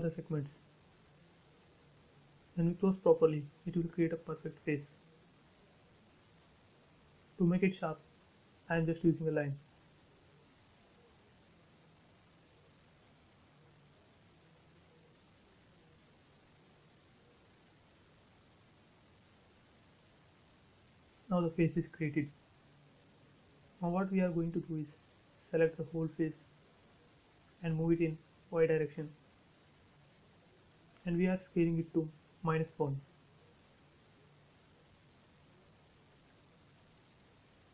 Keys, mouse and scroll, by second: 0.7 click, 0.8 space, 0.9-2.1 scroll down 1, 2.3 l, 2.7 click, 3.4 space, 3.5 scroll down 1, 5.7 shift+middle click, 6.8 l, 7.3 click, 8.0-10.2 scroll up 1, 12.0 click, 13.3 space, 14.0 ctrl+z, 14.7 l, 15.4 click, 16.9-17.5 scroll up 1, 18.6 click, 18.7 space, 18.9-19.4 scroll down 1, 19.7 click, 20.0-20.8 scroll down 2, 22.1 scroll up 1, 22.2 shift+middle click, 23.2-23.7 scroll up 1, 23.7 click, 25.0 scroll down 1, 25.9 m, 26.5 ctrl+click, 27.2 scroll down 1, 29.1 Left, 29.7 click, 29.8 space, 30.4 shift+middle click, 31.4 s, 32.2 click, 34.2-35.3 typing, 34.7 Return, 36.0 scroll up 1.